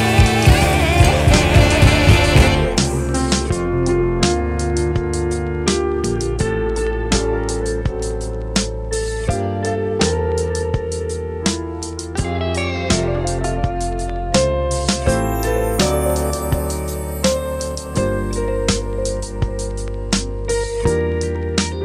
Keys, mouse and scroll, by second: 1.3-2.4 drag, 2.4-3.7 scroll down 4, 3.7-4.4 scroll down 1, 4.7-5.9 middle drag, 5.9-9.7 drag, 10.2-10.6 scroll up 3, 10.8-11.3 scroll down 4, 11.8 click, 12.9 Delete, 13.8 click, 14.9-16.5 drag, 17.0-21.8 drag.